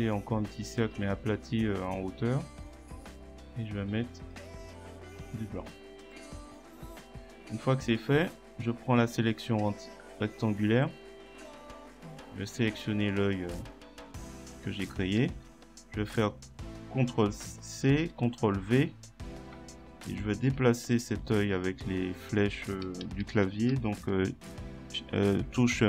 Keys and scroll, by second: 15.2 ctrl+c, 17.9 ctrl+v, 20.2 shift+Right, 24.9 shift+Right.